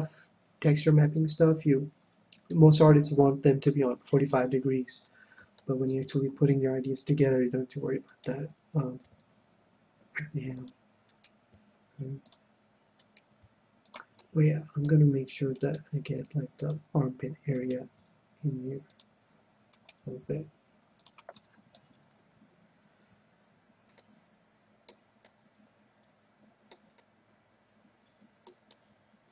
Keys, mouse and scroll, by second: 4.0-5.4 scroll down 1, 5.4-7.1 scroll down 1, 7.1 middle click, 7.1-9.8 right drag, 9.1 g, 10.7 click, 11.1 right click, 11.6 g, 13.1 g, 13.3 g, 14.0-15.5 drag, 14.0-15.9 middle drag, 14.3 right click, 15.5-17.5 right drag, 16.1 g, 16.7-18.3 drag, 17.6-19.3 right drag, 18.0 g, 19.0-20.7 drag, 19.8-21.3 right drag, 20.3 g, 21.1-22.8 drag, 21.5-23.4 middle drag, 21.7 KP_1, 24.0-26.9 middle drag, 27.1-29.3 middle drag.